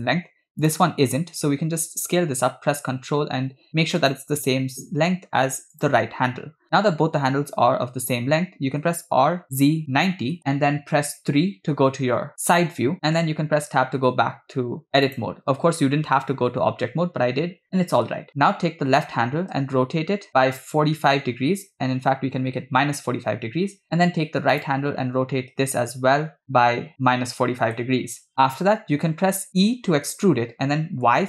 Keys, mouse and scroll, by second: 0.8 click, 1.7 s, 5.8 click, 7.5 Tab, 8.9 r, 11.2 KP_3, 13.2 Tab, 15.1 click, 19.5 r, 24.7 click, 26.4 r, 28.3 shift+middle click, 29.6 e.